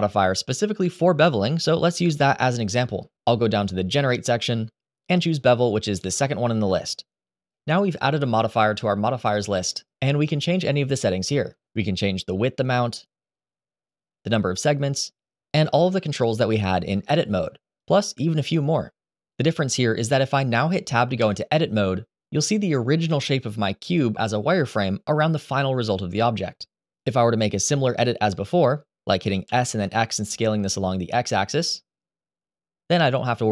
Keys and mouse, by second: 0.0-7.3 drag, 11.6-13.6 drag, 14.2-17.5 drag, 22.6 Tab, 29.2 s, 29.5 x.